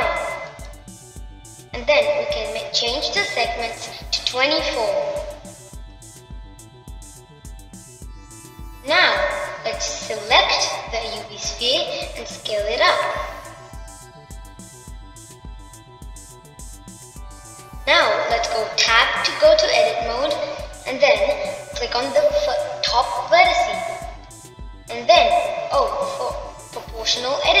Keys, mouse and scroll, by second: 2.3-5.4 drag, 5.5-8.5 drag, 9.3 click, 10.6-12.0 middle drag, 12.0 click, 14.1 s, 17.4-18.9 middle drag, 18.9-20.6 drag, 20.6 b, 22.0 middle click, 26.3-27.6 middle drag.